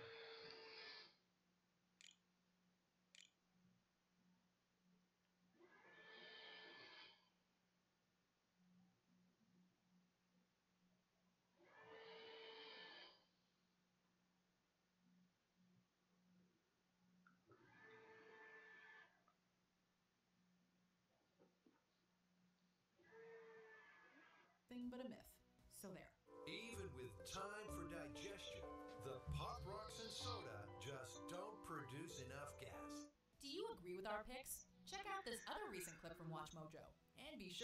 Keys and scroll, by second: 1.1 s, 2.9 ctrl+s, 4.8 a, 22.7-23.6 typing.